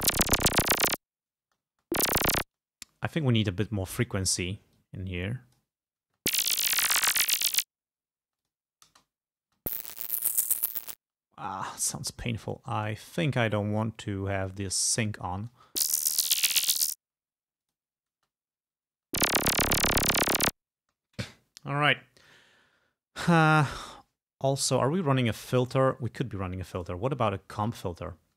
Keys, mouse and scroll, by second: 1.5 space, 2.5 space, 4.0 click, 4.8-5.9 drag, 6.1 space, 8.3 space, 8.5 click, 8.9 space, 11.0 space, 12.6 click, 14.5 click, 15.6 space, 17.1 space, 17.6 click, 18.2 space, 19.0 space, 20.9 space, 26.8 click, 27.7 space.